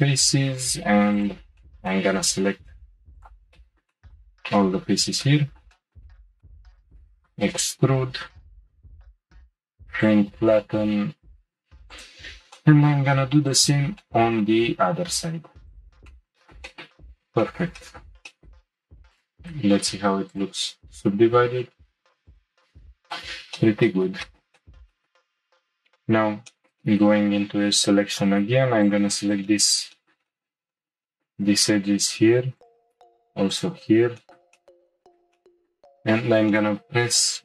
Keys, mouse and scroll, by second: 1.1 ctrl+click, 1.6-3.1 shift+middle drag, 3.1 ctrl+click, 3.5 middle click, 3.7 shift+middle click, 4.4-5.2 scroll up 3, 5.2 middle click, 6.1-6.4 scroll down 2, 6.4 middle click, 6.9 e, 9.0-10.0 drag, 11.9 click, 12.5 middle click, 13.5 ctrl+click, 14.0-15.6 shift+middle drag, 15.6 ctrl+click, 16.2 shift+middle click, 16.4 middle click, 17.0-17.4 scroll down 2, 17.4 shift+middle click, 17.9 middle click, 18.3 shift+middle click, 18.8 Tab, 19.1-22.2 drag, 22.3 click, 23.0 click, 23.6-25.0 shift+middle drag, 25.2 middle click, 25.3 2, 26.5 shift+middle click, 27.2-28.1 scroll up 1, 28.1 click, 28.8 shift+click, 29.2 scroll down 1, 29.5-32.6 shift+middle drag, 32.6 shift+click, 33.5 shift+click, 34.2-35.9 shift+middle drag, 35.9-36.3 scroll up 3, 36.5-37.4 shift+middle drag.